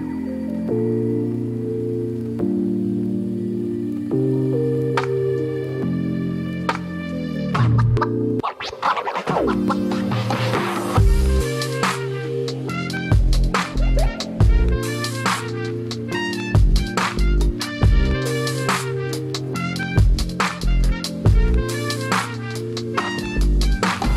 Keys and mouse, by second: 0.0 click, 1.2-1.6 middle drag, 1.7 shift+middle drag, 2.5-4.2 drag, 5.3 click, 5.9 click, 6.6 click, 7.4 click, 8.1 i, 9.1 space, 10.6 click, 10.6 space, 10.9 click, 11.4 click, 12.6 space, 12.7-13.9 drag, 14.0 Right, 14.2 Up, 14.4 Down, 15.2 Up, 15.9 shift+click, 16.3 Down, 16.9 middle click, 17.4 shift+middle click, 19.1-20.3 drag, 21.3 click, 21.5 space, 22.6-23.7 drag.